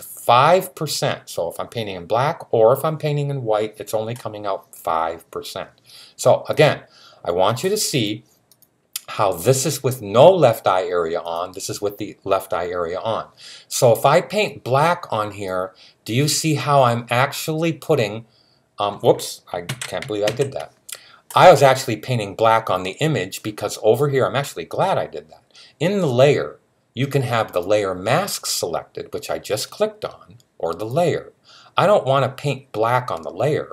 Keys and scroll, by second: 19.5 super+z, 20.1 alt+super+z.